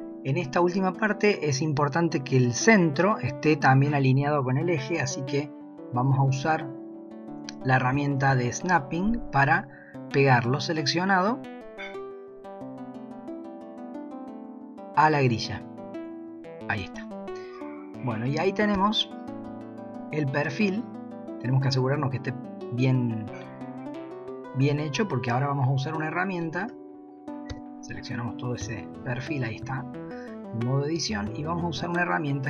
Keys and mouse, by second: 8.2 shift+s, 18.3 shift+middle click, 18.7 Tab, 19.6 shift+middle click, 26.6 Tab, 27.5 a, 28.2 middle click, 29.1-30.5 middle drag.